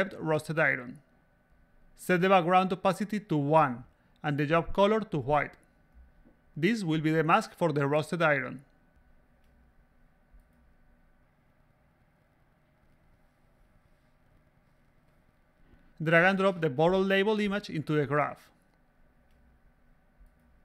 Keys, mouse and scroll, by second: 1.3 click, 1.6-2.2 drag, 3.5-4.1 drag, 4.6 click, 5.6 click, 6.1-6.4 drag, 8.4 click, 9.1-10.7 drag, 11.3 click, 12.4 click, 13.7 a, 13.7 click, 17.5-19.0 drag, 19.7 click.